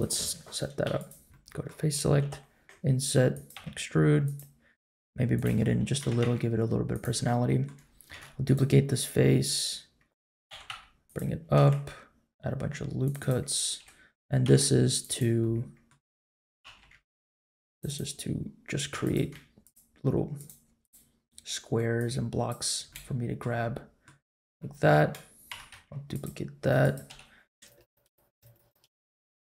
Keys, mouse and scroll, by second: 0.0 click, 0.8 3, 0.9 click, 1.3 middle click, 2.2 i, 3.5 e, 4.9 s, 5.6-6.9 middle drag, 6.0 g, 6.9 click, 7.1 middle click, 8.1 shift+d, 10.5 g, 11.5 ctrl+r, 13.7 ctrl+t, 14.4 ctrl+r, 15.4 middle click, 16.6 ctrl+z, 17.0 ctrl+r, 18.9 3, 19.0 click, 19.6 shift+click, 20.4 shift+click, 22.0 shift+click, 22.9 shift+middle click, 23.5 middle click, 24.6 middle click, 25.5 shift+d, 26.8 click, 27.0 l, 27.5 x, 27.9 click, 28.1 shift+click, 29.1 l, 29.3 l.